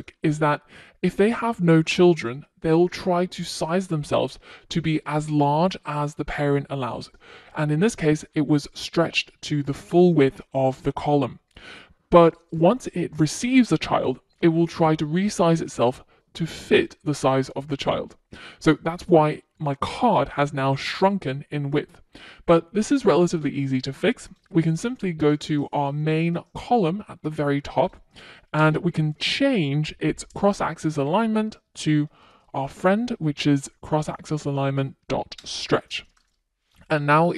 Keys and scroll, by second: 30.2 Return, 34.9 super+s.